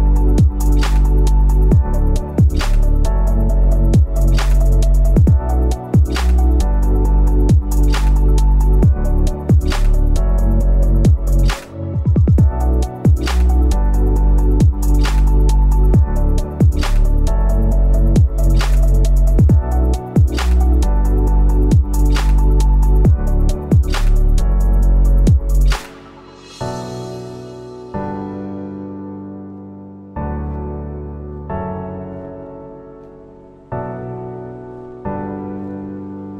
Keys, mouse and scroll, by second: 22.0 double click.